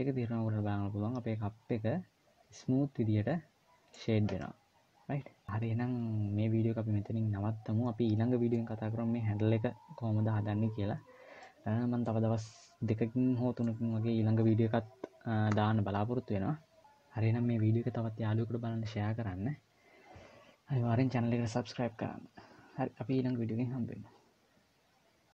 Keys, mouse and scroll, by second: 4.1 middle click, 5.5 middle click, 5.5-5.8 scroll down 2, 11.1 middle click, 12.2 middle click.